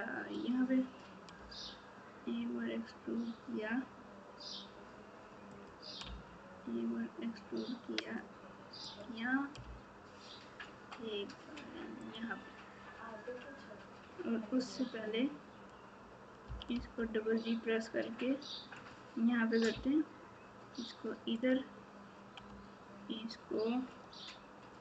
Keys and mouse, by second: 1.3 e, 6.0 e, 9.6 e, 14.6 click, 18.7 g, 19.7 e, 21.3 e.